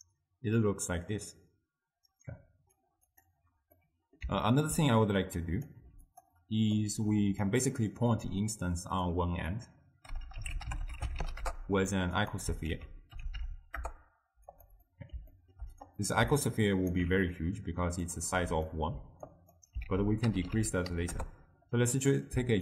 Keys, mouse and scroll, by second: 3.2 click, 3.9 middle click, 4.8-5.4 scroll up 2, 5.4-5.9 drag, 5.9 g, 6.9 click, 9.2-12.4 drag, 12.8 ctrl+a, 15.0-16.0 middle drag, 16.0 click, 16.5-18.2 alt+right drag, 18.2 middle click, 18.7-19.4 scroll down 2, 19.4 click, 20.0 ctrl+a.